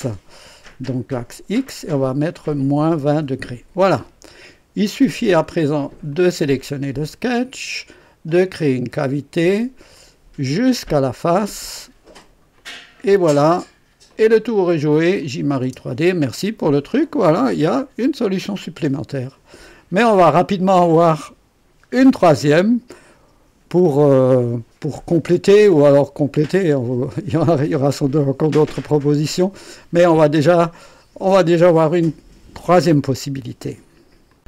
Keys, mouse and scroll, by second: 1.1 click, 2.4 KP_Subtract, 2.7 KP_2, 2.9 KP_0, 3.2 Return, 6.1 click, 8.2 click, 9.9 click, 11.0 click, 12.5 click, 14.0 click, 15.2 click, 15.6 space, 17.2-19.5 drag, 28.2-29.6 drag, 30.4-31.5 drag, 32.7 right click, 34.2 click.